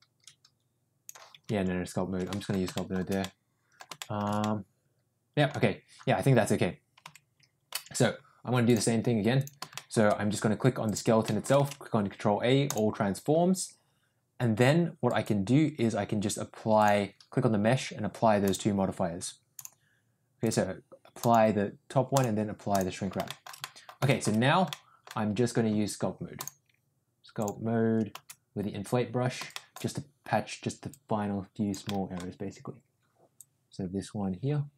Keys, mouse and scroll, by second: 1.7 ctrl+z, 2.2 middle click, 2.7 shift+middle click, 3.1 middle click, 3.9 shift+middle click, 4.3-5.4 middle drag, 7.0 Tab, 7.7 Tab, 8.7 click, 9.7 middle drag, 11.2 middle click, 11.5 ctrl+a, 16.8 click, 18.4 click, 19.5 click, 20.5-21.5 drag, 22.1 click, 23.2 shift+middle click, 23.5 middle click, 24.0 shift+middle click, 24.6 middle click, 26.3-27.4 drag, 29.5 shift+middle click, 30.8 click, 31.8 middle click, 33.3-34.7 drag.